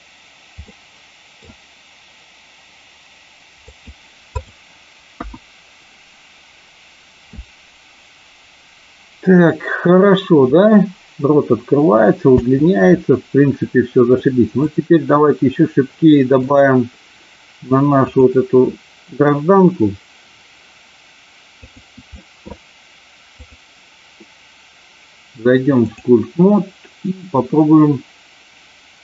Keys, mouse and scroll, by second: 0.6 middle click, 3.5 click, 4.3 click, 5.1 KP_1, 12.3 space, 14.5 click, 16.4 click, 18.0 click, 21.7 click, 23.3-26.2 drag.